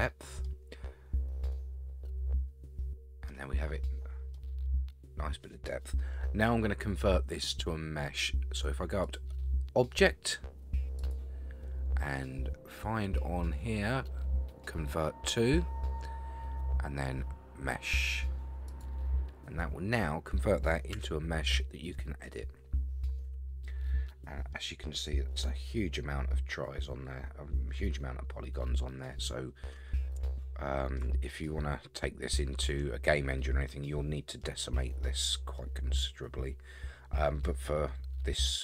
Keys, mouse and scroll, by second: 1.2-1.5 scroll down 4, 1.5-3.3 middle drag, 3.4 scroll up 4, 4.3-5.7 middle drag, 9.0 click, 11.0-18.8 drag, 21.0 Tab, 21.4-21.9 scroll up 5, 21.9-23.2 middle drag, 23.3 Tab, 23.6 scroll down 4, 24.1 middle click, 28.7 scroll down 2, 29.1-30.0 middle drag, 30.4-31.0 shift+middle drag, 31.2-34.4 middle drag, 34.4-35.6 scroll up 8, 35.6-38.6 middle drag.